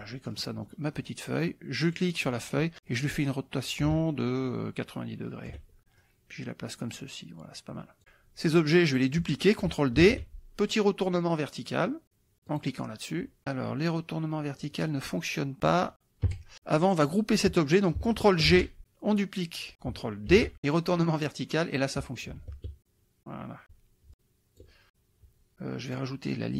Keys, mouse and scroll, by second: 0.3 click, 1.9 click, 2.9-5.7 drag, 6.0-8.3 ctrl+drag, 10.0 ctrl+d, 12.5 click, 16.3 Delete, 17.0 click, 18.5 ctrl+g, 20.3 ctrl+d, 21.2 click, 22.2-23.8 ctrl+drag, 24.1 ctrl+click, 25.9 click, 26.3-26.5 drag.